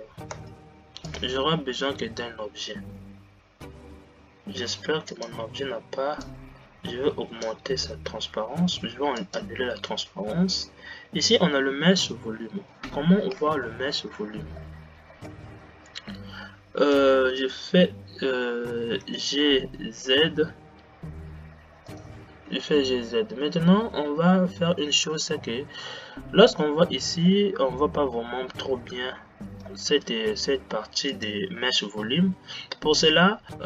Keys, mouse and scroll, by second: 0.6 space, 1.1-1.5 drag, 6.6-13.8 drag, 13.8 shift+Left, 15.4-19.5 middle drag, 19.5 g, 25.8-26.5 scroll up 1, 26.5-27.4 scroll up 1, 27.4-30.4 middle drag, 33.5 click.